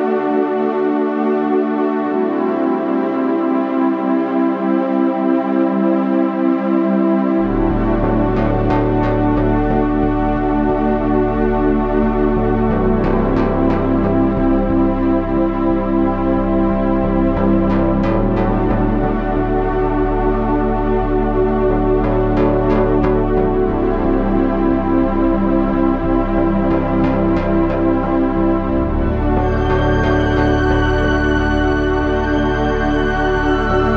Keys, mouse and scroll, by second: 2.6 KP_1, 3.3 z, 3.9 Tab, 4.1 z, 8.4 Tab, 8.9 z, 11.0-13.3 typing, 13.7 Tab, 16.4 z, 16.9 KP_Divide, 20.4 KP_3, 20.8 z, 22.4 c, 28.7 KP_Divide, 29.4 KP_3, 30.1 z.